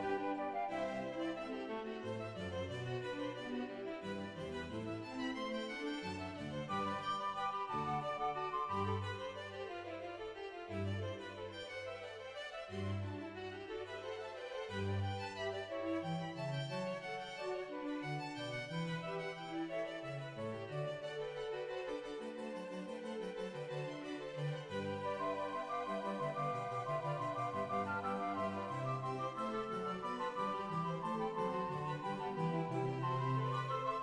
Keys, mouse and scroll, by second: 0.0 middle click, 0.1-1.0 scroll up 1, 1.0-2.0 scroll down 3, 1.0-2.2 typing, 2.2 ctrl+s, 2.2 middle click, 3.0 scroll up 1, 4.6 ctrl+right click, 6.3 right click, 6.3 g, 6.5 click, 9.8 right click, 9.8 scroll down 2, 10.0 g, 10.7 shift+click, 10.7 shift+middle click, 10.7 a, 11.0 right click, 11.8 g, 12.6 shift+click, 13.1 ctrl+s, 13.1 middle click, 13.4 scroll down 3, 13.5-14.0 scroll up 2, 14.0 Tab, 14.0 1, 14.4 shift+middle click, 14.4 scroll up 1, 15.0 middle click, 16.0-17.3 scroll up 2, 17.9 scroll down 2, 17.9 z, 18.7 right click, 19.3 r, 19.3 g, 19.6-21.4 drag, 21.8 click, 21.8 g, 21.8 right click, 22.1 click, 22.1 g, 22.7 right click, 23.4 g, 23.6 click, 30.3 right click, 30.3 a, 31.7 right click, 31.8 click, 31.8 g, 32.4 g, 32.6 right click, 33.1-33.9 scroll down 3, 33.9 shift+middle click, 33.9 right click.